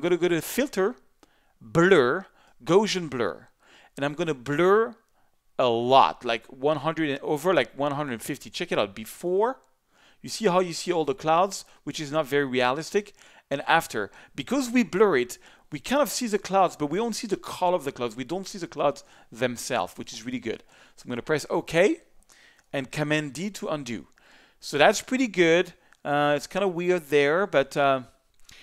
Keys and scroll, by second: 23.4 super+d.